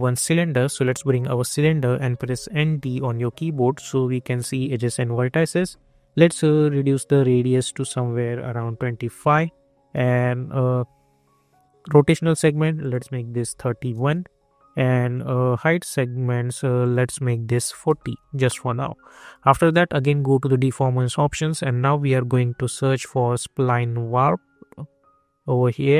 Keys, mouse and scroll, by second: 2.3-3.3 typing, 4.0 scroll up 1, 7.5 click, 9.1 Return, 12.8 click, 13.9 Return, 16.8 click, 18.2 Return, 19.1-22.8 drag.